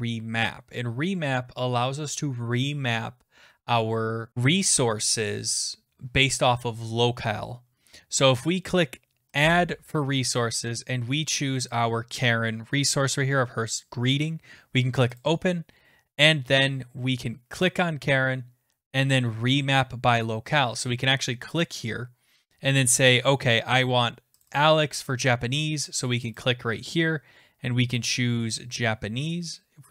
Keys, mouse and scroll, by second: 9.5 click, 11.7 click, 15.2 click, 17.7 click, 21.6 click, 24.4 click, 24.6 click, 26.4 click, 28.3-29.7 scroll down 22.